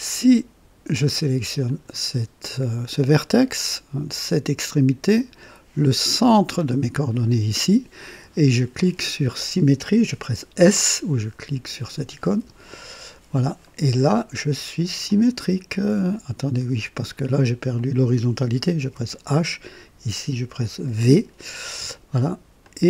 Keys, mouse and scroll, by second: 1.6 click, 4.7 click, 6.9 click, 12.2 s, 15.0-16.8 drag, 17.7 click, 18.9 typing, 20.1 click, 20.9 typing, 22.6-22.8 drag.